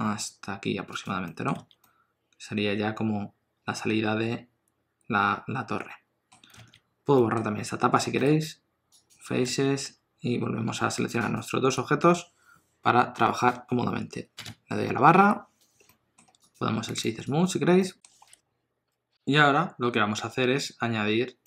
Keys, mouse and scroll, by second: 1.2 middle click, 1.5 alt+z, 1.8 middle click, 6.5 alt+z, 7.1 middle click, 8.1 x, 9.4 alt+z, 9.8 Tab, 11.3 shift+click, 15.2 KP_7, 15.8 middle click, 16.3 click, 16.8 right click, 17.8 middle click, 18.2 KP_7.